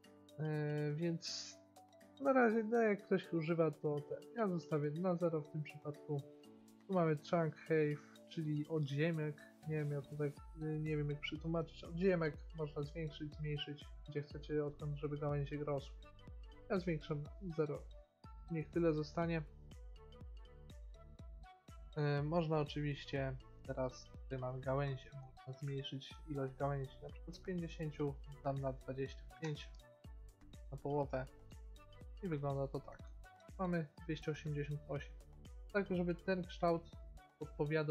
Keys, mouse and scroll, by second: 4.7-6.5 drag, 6.6 click, 12.0-13.8 drag, 17.2-18.8 drag, 18.9 middle click, 19.3-21.2 middle drag, 24.6-26.0 middle drag, 27.2-30.0 drag, 32.2 shift+middle click.